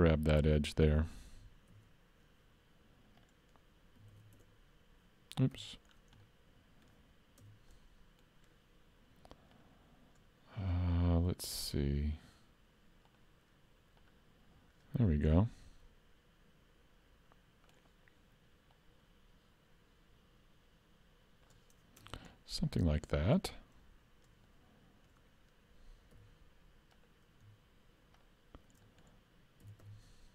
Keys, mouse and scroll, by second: 0.5 alt+click, 1.7 ctrl+e, 4.1 alt+a, 6.0-6.3 scroll down 3, 6.3 middle click, 7.4 Tab, 7.7 middle click, 9.5 click, 11.0 click, 11.6 click, 13.1 click, 14.0 click, 15.1-16.0 scroll up 4, 15.4 middle click, 18.7 click, 22.0 Tab, 22.3-22.7 scroll up 1, 22.7 middle click, 24.5 middle click, 26.2 2, 26.9 click, 28.2 shift+click, 28.9 middle click, 29.7 s.